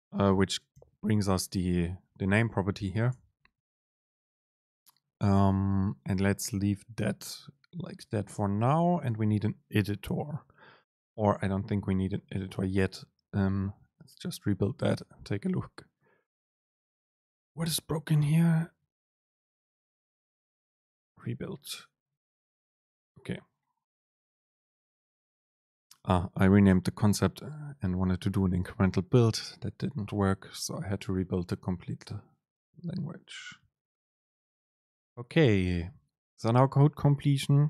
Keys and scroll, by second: 0.9 super+b, 3.2 alt+super+[, 35.1 super+space.